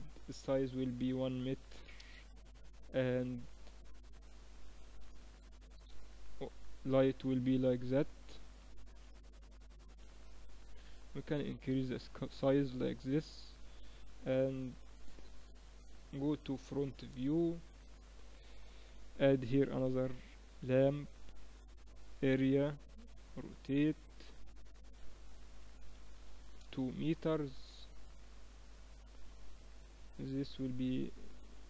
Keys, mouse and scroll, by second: 3.5-5.4 drag, 5.1 8, 7.7-9.6 drag, 9.5 r, 11.2-13.0 drag, 14.2 KP_3, 15.5 KP_1, 17.1-18.4 drag, 18.4 shift+a, 22.6 r, 24.9-26.7 drag, 28.1-30.8 drag.